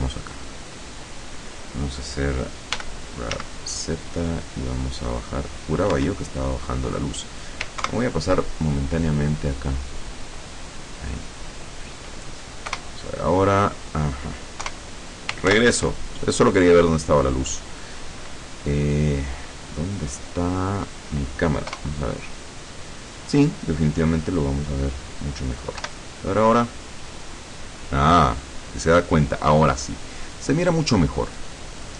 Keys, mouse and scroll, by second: 0.3 right click, 2.8 g, 3.4 z, 6.1 Escape, 7.9 ctrl+Right, 9.1-9.7 scroll down 4, 10.9-12.3 drag, 12.8 KP_0, 14.7 KP_0, 15.6 ctrl+Left, 20.5-21.2 scroll down 4, 21.3 scroll up 2, 21.8 KP_0, 23.9-25.4 drag, 25.9 F12.